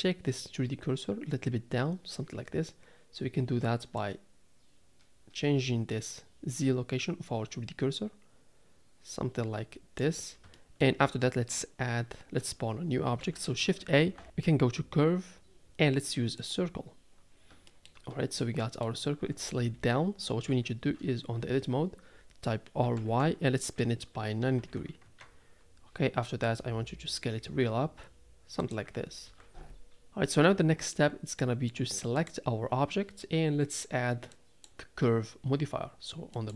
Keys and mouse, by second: 4.0-10.1 drag, 10.5 shift+middle drag, 13.2 n, 13.9 shift+a, 17.8 shift+middle click, 18.5 click, 20.5 KP_3, 21.4 Tab, 22.8 r, 26.4 s, 29.2 Tab, 30.9-31.4 middle drag, 32.2 click, 34.3 click, 36.3-36.5 drag.